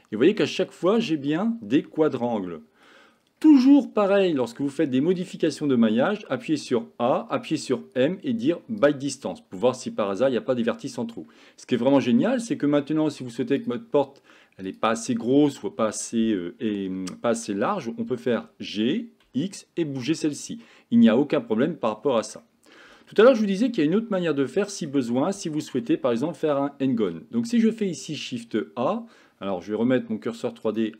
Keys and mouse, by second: 1.8 f, 2.3 middle click, 3.8 shift+middle click, 4.6 middle click, 6.2 a, 6.6 a, 7.6 m, 9.9-11.2 middle drag, 14.7 click, 18.3 g, 22.5 middle click, 23.8 shift+middle click, 24.5 middle click, 25.2 shift+middle click, 27.0 shift+a.